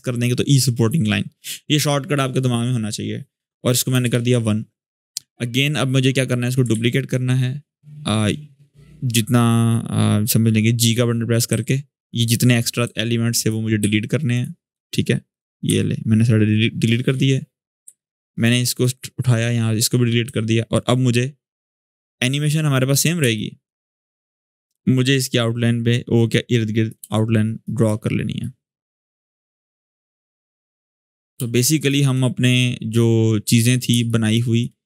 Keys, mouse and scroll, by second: 3.7 1, 3.8 Return, 5.6-6.2 click, 6.5 ctrl+d, 10.5 v, 11.2 g, 11.7 click, 17.4-22.2 drag, 22.3-23.0 scroll up 1, 23.0 space, 23.1 click, 24.1-27.5 drag, 26.8 space, 26.9 click, 27.3 space, 28.2-31.3 drag, 31.1 space, 31.3-31.9 drag, 34.2 space, 34.7-34.8 drag.